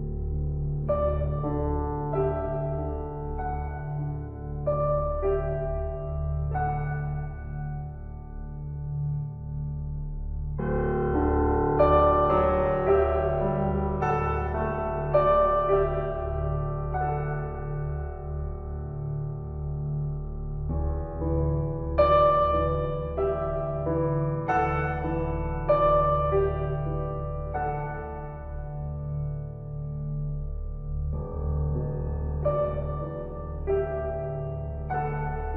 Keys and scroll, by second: 13.9 ctrl+t, 25.2 ctrl+t.